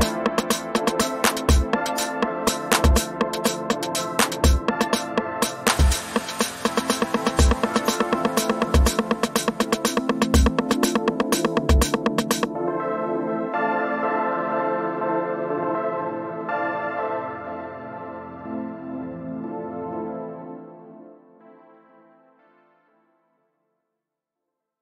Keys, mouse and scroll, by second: 1.7 ctrl+z, 3.6 click, 4.9-5.7 typing, 6.9 click, 7.7 typing, 8.7 typing, 9.1 Return, 10.1-11.5 drag, 12.0 ctrl+d, 12.1-14.1 drag, 15.0-16.9 typing, 17.6 click, 22.2 h, 23.3 space, 23.6 click, 23.8-24.6 space.